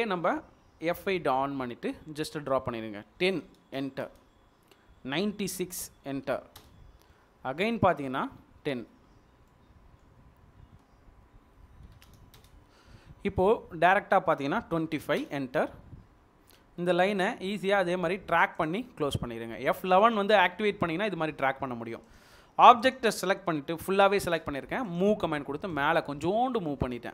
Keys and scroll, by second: 3.5 typing, 4.1 Return, 5.9-6.7 typing, 11.8 typing, 12.4 Return, 14.7-15.4 typing, 20.4 Escape, 24.2 m, 24.5 space, 26.8 typing.